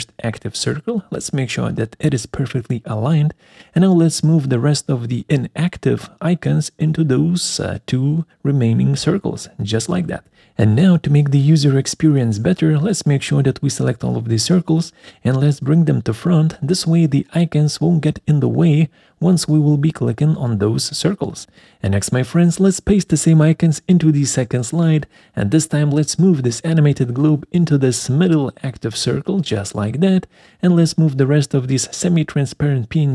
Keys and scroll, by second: 0.1 ctrl+alt+Left, 0.3 ctrl+alt+Down, 4.5 ctrl+alt+Right, 4.7 ctrl+alt+Down, 8.8 ctrl+alt+Right, 8.9 ctrl+alt+Down, 20.1 ctrl+x, 22.2 ctrl+v, 29.0 ctrl+alt+Right, 29.2 ctrl+alt+Up.